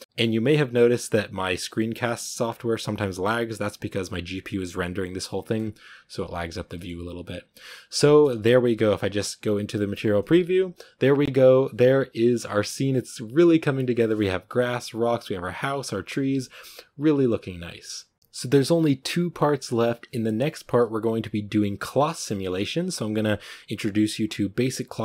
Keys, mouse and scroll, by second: 0.0 z, 4.2 z, 6.6-8.9 shift+middle drag, 8.9 z, 22.1 right click.